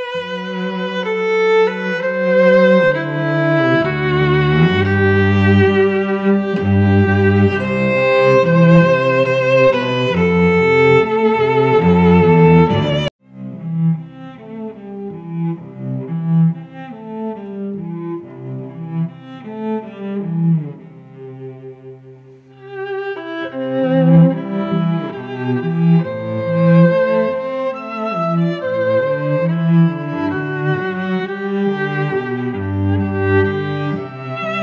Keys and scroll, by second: 18.9 F9, 24.7 Return, 26.2 space, 26.8 v, 27.8 space, 29.0 y, 29.5 t, 31.2 ctrl+t.